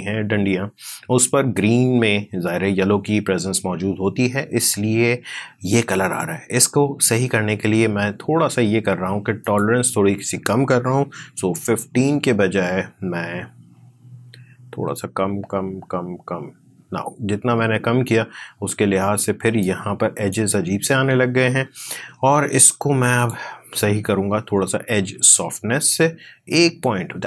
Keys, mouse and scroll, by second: 9.3 click, 11.3 Down, 19.5-22.8 drag, 23.1 click, 25.3 Up.